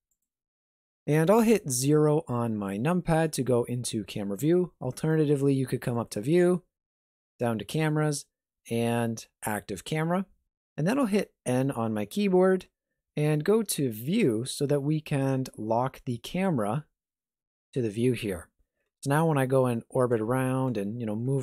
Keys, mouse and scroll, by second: 1.6 KP_0, 3.0-3.6 scroll up 2, 4.6-5.9 scroll up 1, 5.9 click, 10.4 n, 13.9 click, 16.1 click, 18.8 n, 19.1-19.5 scroll down 1, 20.0 scroll down 8, 20.2 shift+middle click, 20.8 middle click.